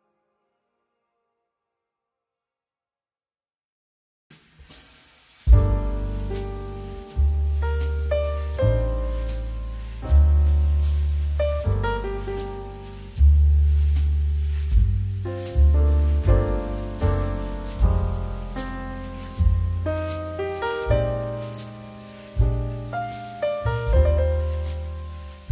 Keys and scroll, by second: 0.9 space, 1.9 space, 8.0 space, 9.5 space, 10.2 z, 12.7 space, 14.6 space, 16.3 space, 17.5 space, 20.4 2, 23.7 z.